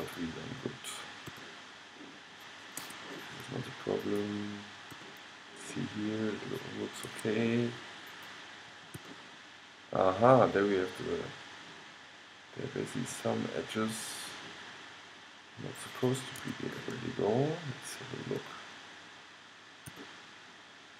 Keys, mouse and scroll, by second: 0.2-1.9 drag, 1.5 g, 2.2-4.2 middle drag, 5.2 g, 5.6 click, 6.2 middle click, 8.2-10.2 drag, 9.0 g, 17.4-19.0 middle drag, 20.0 g, 20.3-20.9 middle drag.